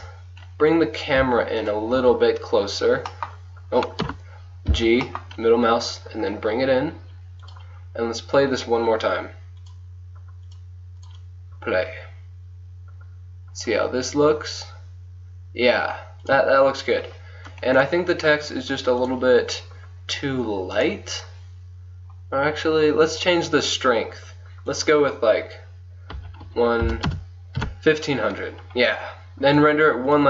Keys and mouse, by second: 1.2 z, 1.7-4.3 drag, 2.0 z, 4.1 KP_0, 4.8 g, 9.6-10.9 drag, 12.2 click, 16.3-17.9 drag, 17.9 middle click, 18.2 click, 19.1 middle click, 19.7-21.2 drag, 22.4 click, 23.3-24.8 drag, 27.1 KP_0.